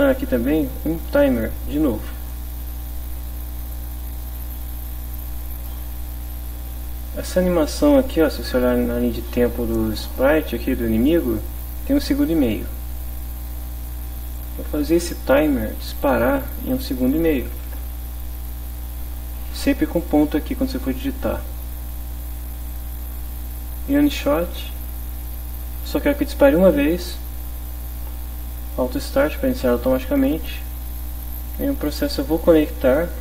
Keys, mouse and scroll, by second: 2.2 click, 5.7-12.8 drag, 14.3 click, 15.9 click, 16.7 1, 17.3 ., 17.4 5, 17.7 Return, 20.0 click, 22.6 click, 25.1 click, 29.7 click, 31.4 click, 32.7 click.